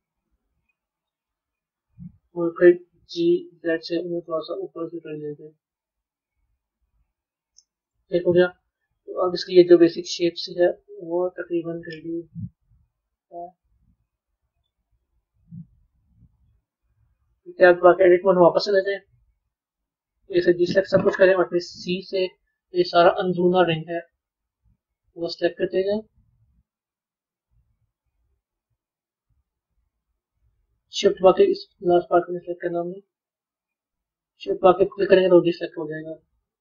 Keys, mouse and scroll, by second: 0.6-3.0 middle drag, 5.5-8.2 middle drag, 8.2 Tab, 8.6-11.6 middle drag, 17.2 b, 18.4-19.8 middle drag.